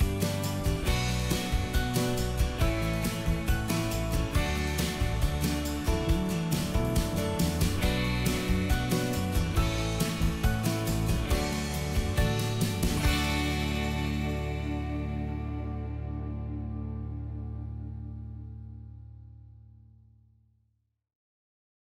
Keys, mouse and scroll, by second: 0.4 shift+middle click, 0.9 shift+click, 1.3 shift+click, 1.5 shift+middle click, 2.2 right click, 3.6 click, 4.5 middle click, 5.9 scroll down 1, 6.4 middle click, 6.8 click, 7.2 g, 7.4 middle click, 7.9 shift+middle click, 8.2-8.5 scroll up 1, 8.5 s, 9.4 click, 10.6-12.5 middle drag, 12.6 shift+middle click.